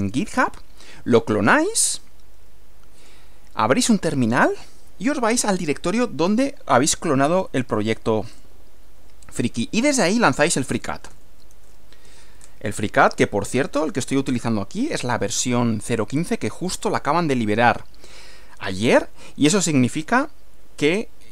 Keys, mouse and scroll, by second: 3.0 click, 8.3 click, 10.5-12.2 typing, 12.3 Return.